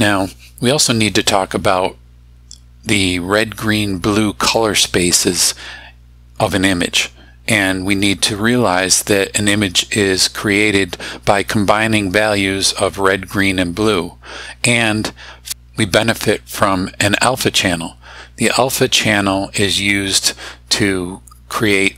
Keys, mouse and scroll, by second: 1.7 click.